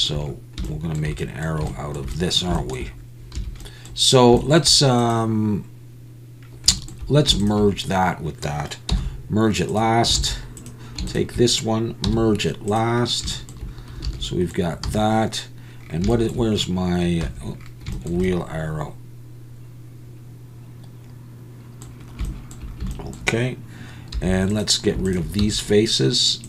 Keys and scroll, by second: 8.9 m, 10.2 alt+a, 12.1 m, 14.1 alt+a, 14.9 z, 24.1 3, 25.4 x.